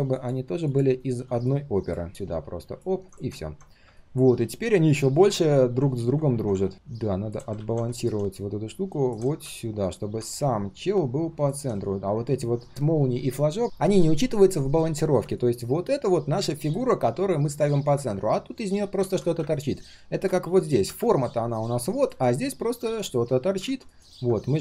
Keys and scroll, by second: 1.0 ctrl+[, 7.5 ctrl+z, 19.0 ctrl+z, 23.6 ctrl+z.